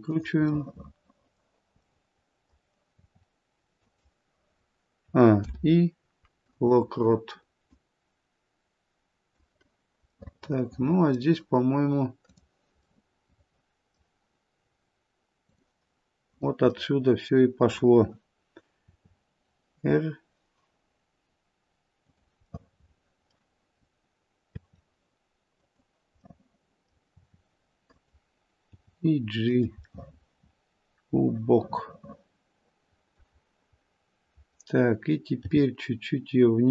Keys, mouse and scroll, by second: 0.5 middle click, 1.9 middle click, 2.9 r, 5.0 a, 5.4 i, 7.7 click, 10.2 middle click, 12.3 click, 12.9 middle click, 13.8 middle click, 15.5 click, 16.2 click, 16.9 middle click, 18.8 r, 22.4 middle click, 22.4 scroll up 1, 24.5 r, 26.2 middle click, 27.0 r, 28.7 g, 29.9 middle click, 32.5 middle click, 32.8 middle click, 33.1 middle click, 33.4-34.6 scroll down 2, 35.4 g.